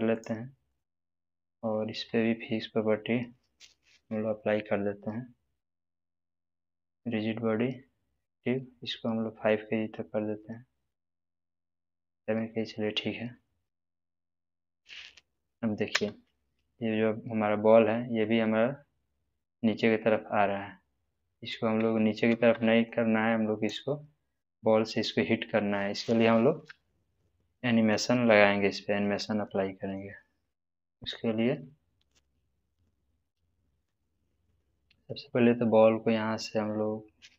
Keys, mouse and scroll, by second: 0.1 right click, 0.7 click, 6.8 click, 9.4-12.2 drag, 14.7-15.6 middle click, 15.9 space, 22.2 space, 22.8-23.7 drag, 26.8-28.1 shift+middle drag, 33.8 click.